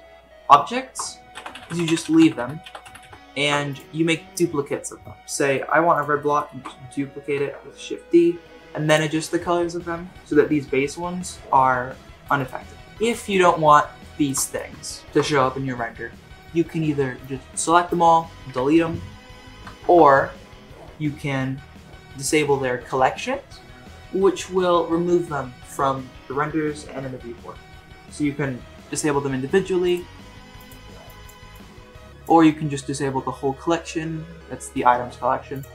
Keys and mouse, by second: 1.3 ctrl+z, 1.6 ctrl+z, 1.7 ctrl+z, 1.8 ctrl+z, 2.0 ctrl+z, 2.2 ctrl+z, 2.4 ctrl+z, 2.6 ctrl+z, 2.8 ctrl+z, 3.0 ctrl+z, 5.3 shift+middle drag, 5.9 click, 6.2 shift+middle drag, 6.5 shift+d, 8.4 shift+d, 11.2-12.2 drag, 12.3 click, 12.8 Delete, 13.2 shift+middle drag, 13.5 middle drag, 14.1 shift+middle drag, 14.4 middle click, 17.2-17.9 drag, 18.5 Delete, 19.7 ctrl+z, 29.9 click, 30.6 click, 31.1 click, 31.5 click, 35.5 click.